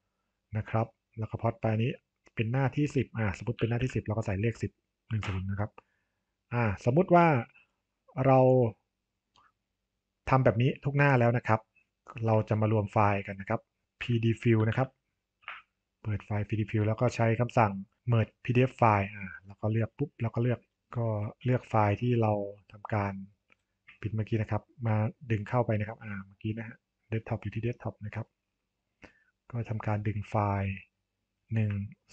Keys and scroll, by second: 5.1 Return, 5.3 Return, 15.3 Return, 20.7 super+e.